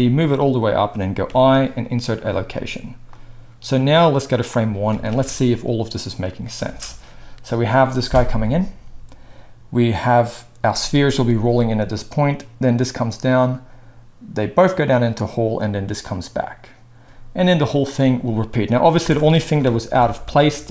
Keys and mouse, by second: 0.9-3.1 middle drag, 1.2 i, 3.1-20.7 drag, 4.9 alt+a, 6.6 space, 19.0 space, 19.9 shift+Left, 20.3 shift+Right.